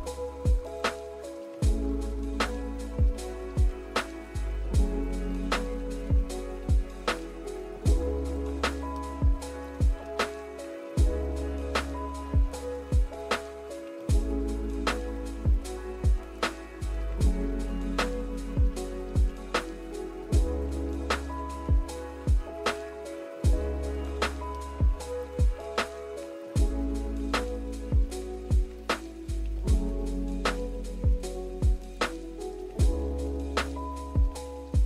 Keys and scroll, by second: 4.2 v, 23.6 z, 24.6 v, 29.5 z.